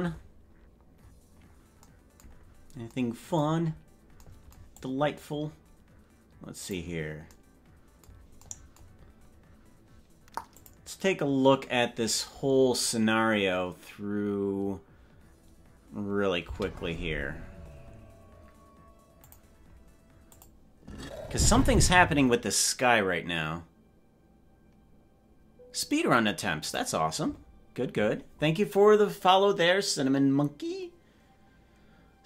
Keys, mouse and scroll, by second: 1.1-1.7 scroll up 11, 2.5-2.9 scroll up 2, 3.7-4.1 scroll up 2, 4.9-6.9 drag, 10.5 click, 16.6 space.